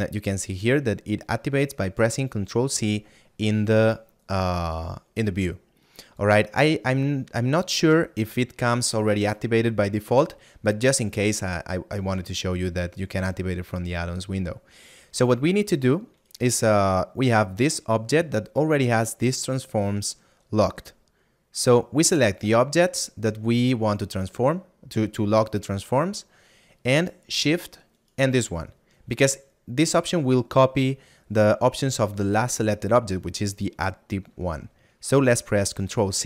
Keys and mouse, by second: 5.8 click, 16.2 right click, 27.9 shift+right click.